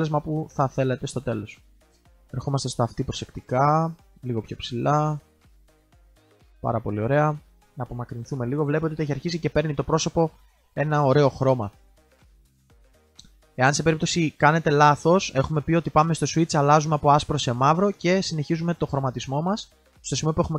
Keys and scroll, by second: 7.2 ctrl+z.